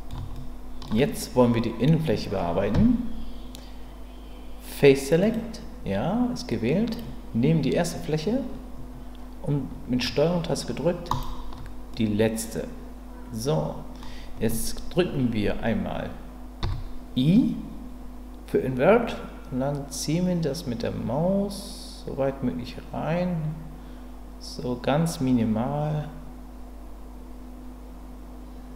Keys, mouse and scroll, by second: 2.7 Tab, 5.2 click, 11.9-14.0 middle drag.